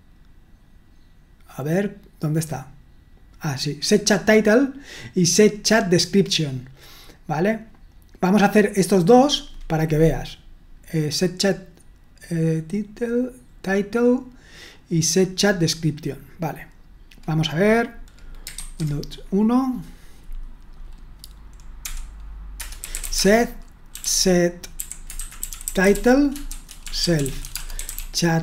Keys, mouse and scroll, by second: 18.6 super+1, 22.6 Return, 22.6-28.4 typing.